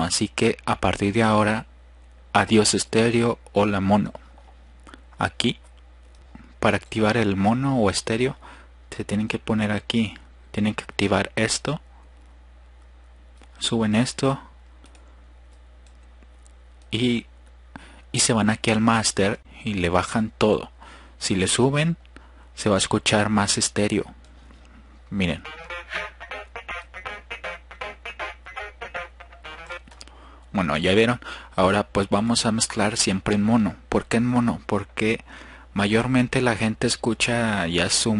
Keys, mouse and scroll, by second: 0.5 click, 1.3 click, 3.9 drag, 7.0-8.1 drag, 8.3 Return, 15.1-15.7 drag, 15.9 drag, 16.5 click, 20.4 click, 24.2 F1, 26.4 click, 30.3 click, 31.4 click, 33.3 click.